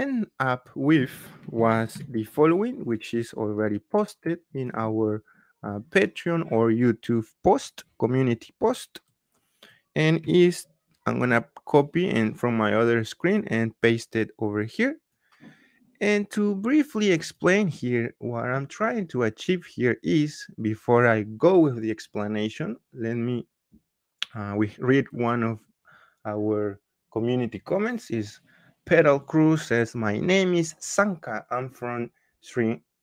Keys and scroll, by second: 1.6 ctrl+c.